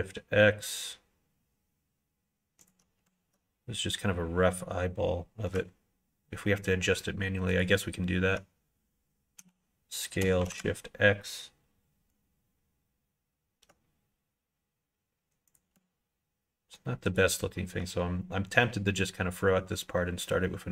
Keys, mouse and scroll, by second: 9.3 s, 17.0 ctrl+right click.